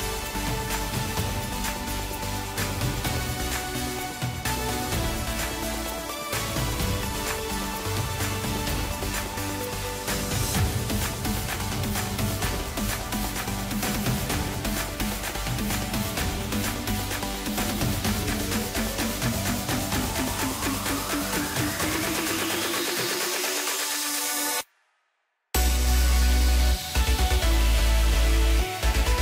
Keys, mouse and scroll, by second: 0.7 Tab, 2.1 click, 3.5 click, 3.7 click, 5.6 click, 7.6 click, 10.5 click, 10.8-12.4 middle drag, 12.4 x, 13.2 middle click, 14.2 Tab, 15.2 KP_1, 16.2 KP_3, 17.2-18.8 right drag, 18.8-20.4 middle drag, 20.4 KP_Divide, 21.3 s, 24.1 click, 24.4 scroll up 2, 25.1 s, 26.2 g, 28.4 s.